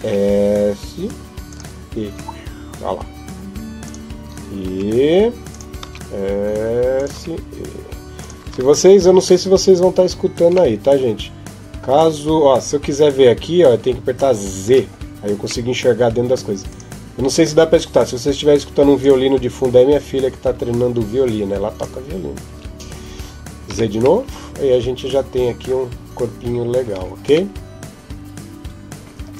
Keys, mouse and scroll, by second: 1.9 e, 5.7 s, 6.9 e, 9.6 Tab, 10.1 Tab, 10.5 middle click, 14.4 z, 15.5 middle click, 16.5 right click, 18.8 click, 22.3 Tab, 23.5 z, 24.0 middle click, 26.3 scroll up 1, 26.5-26.9 scroll down 2, 27.4 middle click, 29.1-29.3 scroll up 3.